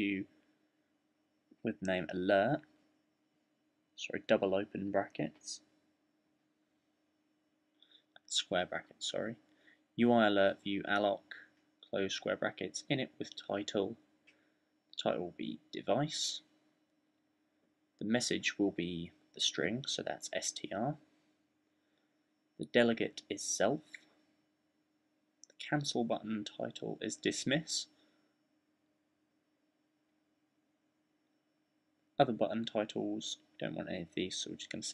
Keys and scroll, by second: 0.0-0.5 typing, 1.6-3.1 typing, 5.2-5.9 typing, 7.8-10.2 typing, 12.6-15.8 typing, 20.6-21.7 typing, 24.1-25.1 typing, 29.4-31.6 typing.